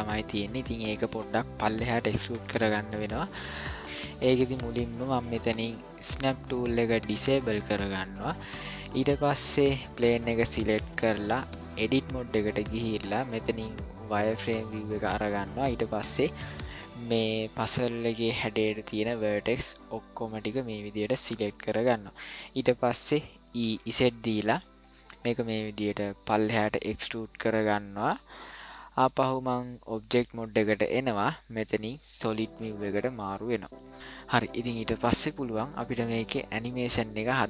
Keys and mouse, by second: 7.1 click, 10.9 click, 14.2 click, 15.3 middle click, 17.2-20.1 drag, 21.5-22.7 middle drag, 23.5 e, 27.2 middle click, 29.4 click, 32.2 click, 33.0-33.9 middle drag.